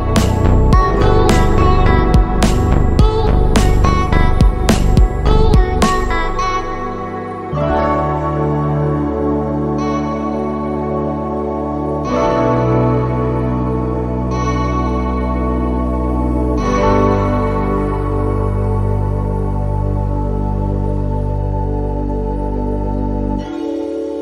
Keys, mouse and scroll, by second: 0.8 click, 2.0 click, 3.4 click, 4.7 click, 5.6 click, 7.3 click, 7.9-8.9 shift+middle drag, 12.8 click, 14.0 click, 14.7 click, 15.6 shift+middle click, 19.1 super+2, 20.6 click, 22.3 click, 23.1 3, 23.8 click.